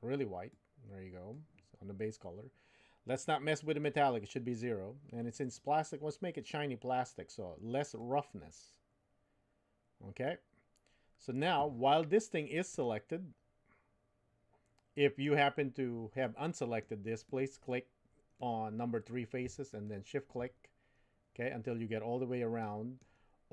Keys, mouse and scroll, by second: 8.0-10.2 drag, 12.7-15.4 middle drag, 16.2 middle click, 17.3 click, 18.4 middle click, 22.6 middle click.